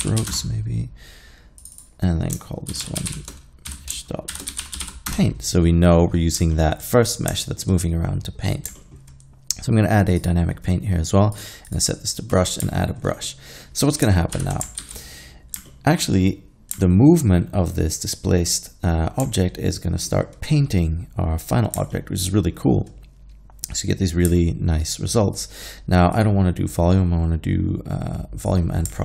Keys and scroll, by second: 0.0 typing, 2.8-4.8 typing, 5.1 Return, 9.1 typing, 14.4 shift+Left, 14.8 alt+a.